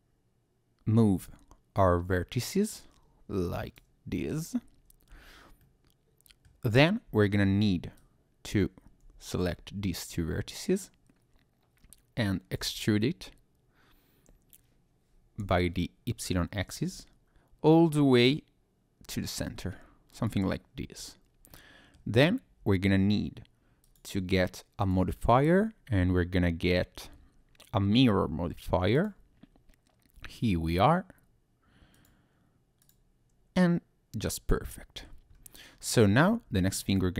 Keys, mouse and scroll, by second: 4.1 Tab, 5.1 Tab, 5.6 middle click, 7.1 Tab, 7.4 Tab, 8.0 click, 9.2 shift+click, 12.6 e, 15.4 y, 20.1 click, 20.8 Tab, 21.5 middle click, 22.0 Tab, 22.6 Tab, 23.8 click, 24.8 click, 31.9 click, 32.8 click, 33.6 middle click, 35.3-35.7 scroll up 2, 35.7-36.2 scroll down 1, 36.2 Tab, 36.8 middle click.